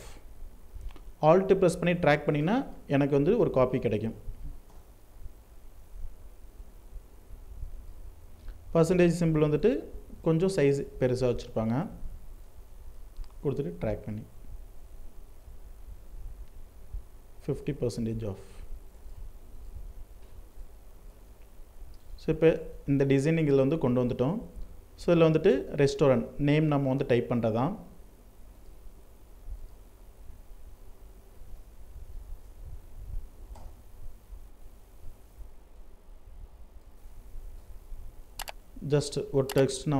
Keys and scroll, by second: 3.9 ctrl+Return, 10.7 ctrl+t, 18.2 alt+space, 32.8 ctrl+Return, 34.0 ctrl+t.